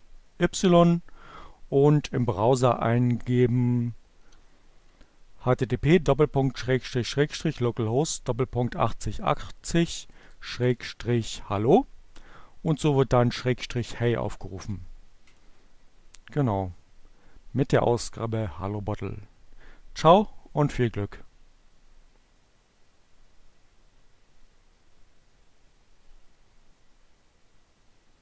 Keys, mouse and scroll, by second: 4.2 h, 4.9 Down, 9.3 BackSpace, 12.0 Return.